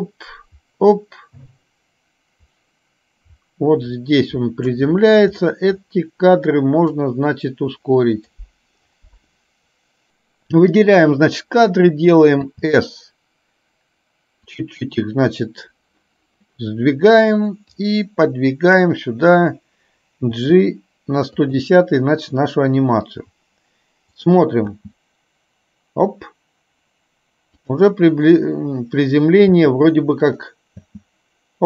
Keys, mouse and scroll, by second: 7.0-8.5 drag, 18.0-18.9 drag, 24.2 click, 24.8 space, 27.7 click, 29.7 space, 30.4 click.